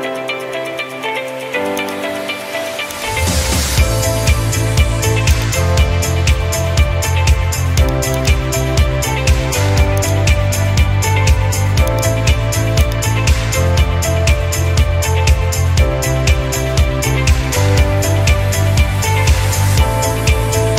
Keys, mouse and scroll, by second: 0.0 scroll down 1, 1.9 click, 2.1 scroll down 4, 3.0 ctrl+click, 3.8 Escape, 4.3 Escape, 4.8 scroll, 4.8 middle click, 4.9 middle click, 5.3 scroll, 6.0 click, 6.3 middle click, 7.1 middle click, 7.9 ctrl+click, 8.2 ctrl+click, 9.3 middle click, 10.1 ctrl+click, 12.0 click, 13.0 click, 17.9 scroll, 19.1 scroll, 20.4 scroll.